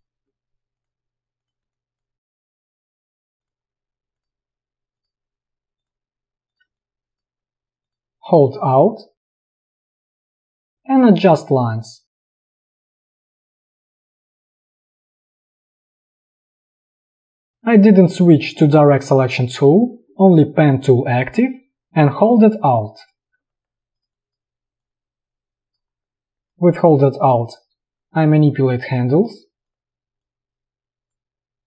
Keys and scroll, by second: 6.8 space.